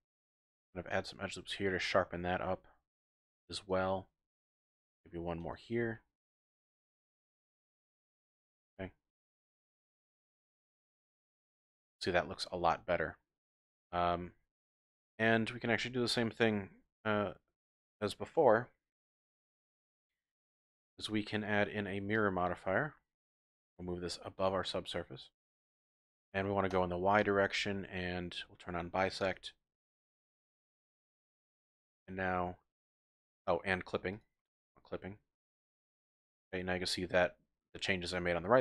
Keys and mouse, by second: 0.1 click, 0.6 ctrl+r, 3.5 click, 4.3 ctrl+r, 5.4 click, 7.1 click, 8.4 z, 9.1 z, 9.9 Tab, 10.7 z, 11.3-11.8 drag, 11.8 middle drag, 12.0 click, 12.4 middle drag, 12.5 click, 12.6-13.3 middle drag, 13.5 Tab, 14.6 KP_1, 15.1 KP_3, 16.1 shift+middle click, 16.8 ctrl+r, 22.2-23.4 drag, 24.4-25.3 drag, 26.7 click, 27.2 click, 29.2 click, 31.7-33.0 middle drag, 34.6 shift+click, 35.7 Tab, 36.3-36.6 drag.